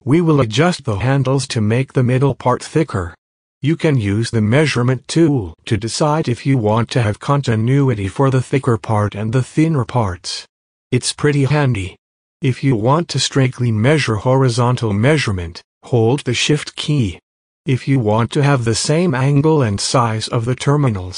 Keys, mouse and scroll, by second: 0.6 space, 0.7 click, 0.8 space, 2.1 alt+scroll up 1, 2.8 click, 2.9 space, 3.1 click, 3.2 space, 4.0-10.1 drag, 10.1 space, 11.1 space, 11.6 click, 12.0 space, 12.5 click, 14.3 space, 14.5 click, 14.6 space, 15.9 click, 16.6 click, 17.3 click, 17.4 space, 17.6 click, 17.7 space, 18.5 space.